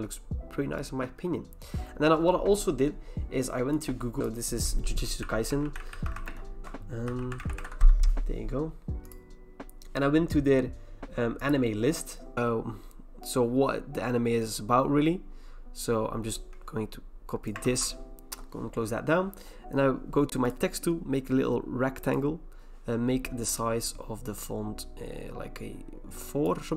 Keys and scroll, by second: 4.7-8.2 typing, 17.6 ctrl+c.